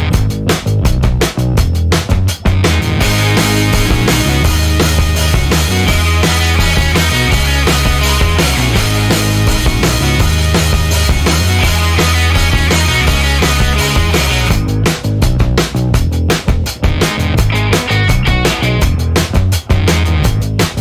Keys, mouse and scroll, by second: 0.1 click, 1.1 click, 2.9 click, 3.3 click, 4.0 click, 5.4-6.2 scroll down 4, 6.3-6.7 scroll down 2, 8.4-8.8 scroll down 2, 9.2-9.8 scroll down 4, 10.3 click, 11.1 click, 12.7 click, 14.1-15.1 typing, 16.0 click, 17.0 0, 18.4 click, 19.8 click, 20.6 click.